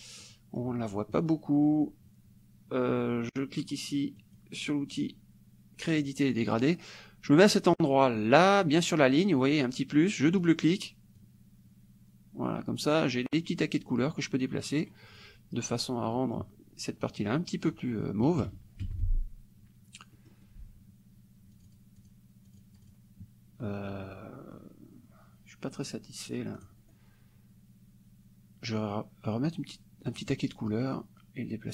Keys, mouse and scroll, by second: 0.3 click, 4.2 click, 10.4 click, 11.2-15.0 drag, 16.1 click, 18.3 KP_Subtract, 18.9 F1, 20.3 click, 21.7 click, 22.1 click, 22.6 click, 26.6 click, 30.3 click, 31.0-31.7 drag.